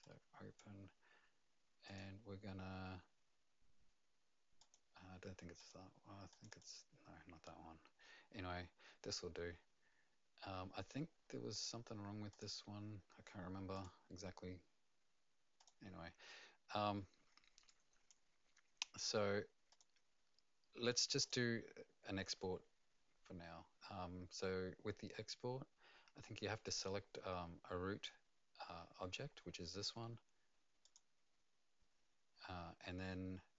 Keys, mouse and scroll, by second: 0.0 click, 1.8 click, 4.6 click, 5.6 click, 6.5 click, 11.5 click, 12.3 click, 13.7 click, 15.6 click, 17.6 click, 19.7 click, 21.2 click, 26.7 click, 30.8 click.